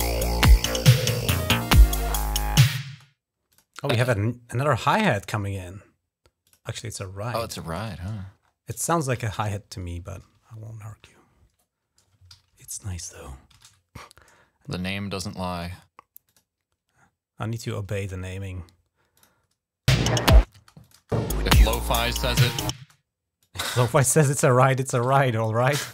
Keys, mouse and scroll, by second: 0.6 click, 2.6 space, 3.3 click, 4.9-5.5 scroll down 2, 6.2 click, 7.7-8.3 scroll up 3, 9.0 ctrl+Up, 11.6 scroll up 1, 12.3 ctrl+Down, 12.9 ctrl+Up, 13.3 ctrl+Down, 14.9 click, 18.9 click, 19.7-20.8 typing, 20.6 click, 22.6 space, 23.2 click, 24.0 click, 24.8 click, 25.8-25.9 drag.